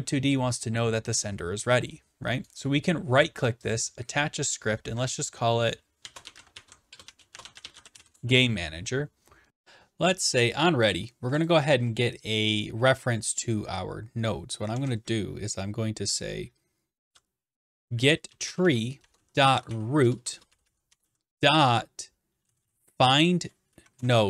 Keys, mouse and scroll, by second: 2.6-3.8 right drag, 3.8-4.8 drag, 5.8-9.5 typing, 11.5 click, 12.4 click, 14.7 Return, 17.0-20.2 typing, 21.2-21.9 typing, 23.0 typing, 23.7 Down, 24.0 Return.